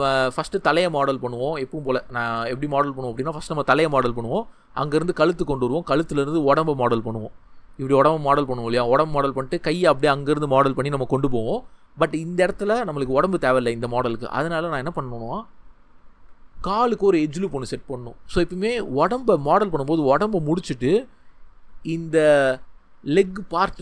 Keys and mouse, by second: 4.8-15.6 drag, 16.0 shift+middle click.